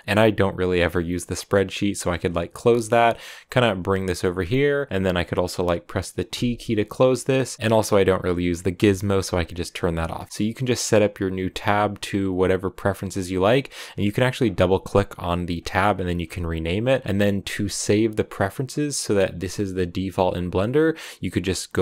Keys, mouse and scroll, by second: 1.5-7.2 drag, 7.2 t, 9.4 click, 15.3-21.8 drag.